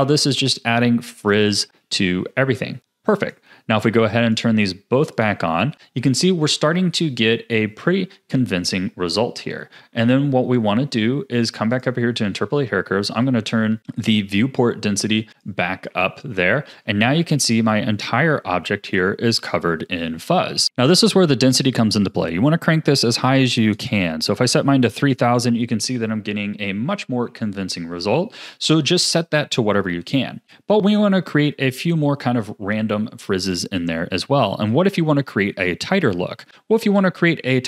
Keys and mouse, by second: 3.2 click, 4.2 click, 5.1 click, 6.0 a, 6.4 a, 11.7 click, 13.2 click, 14.7 click, 15.9 a, 16.3 a, 20.6 a, 22.2-24.6 drag, 23.6 KP_0, 23.8 KP_0, 26.2 a, 26.4-27.3 drag, 27.3 a, 29.9 KP_1, 36.9 click.